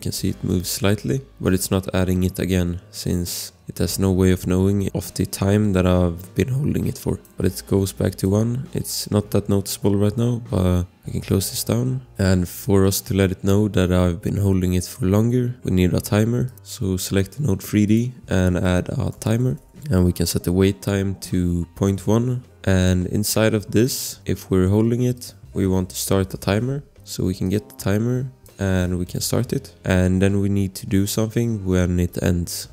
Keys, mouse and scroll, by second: 7.2 click, 16.4 click, 18.8-20.1 typing, 19.5 click, 19.9 click, 21.5 ., 21.8 1, 22.0 Return, 22.8 click, 25.1 click, 26.0 Return, 27.4 click, 29.6 Return, 31.0 click.